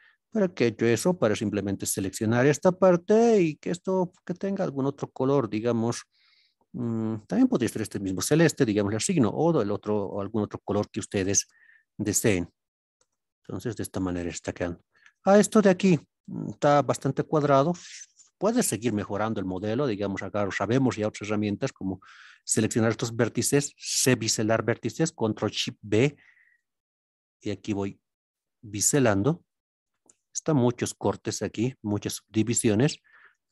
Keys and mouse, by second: 0.9 3, 1.3 click, 2.8 middle click, 8.1 click, 9.1 click, 10.1 click, 11.2 alt+z, 13.0 a, 14.4-14.9 middle drag, 18.9 KP_1, 21.4 shift+click, 29.9 click, 31.7 click, 33.1 shift+middle click.